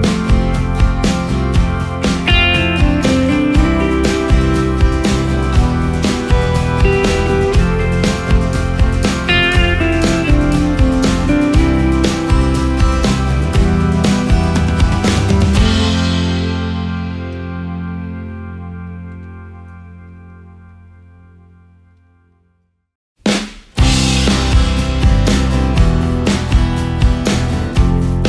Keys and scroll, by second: 2.2 ctrl+space, 8.2 Delete, 8.8 space, 9.8 ctrl+space, 24.6 ctrl+space, 27.3 Delete.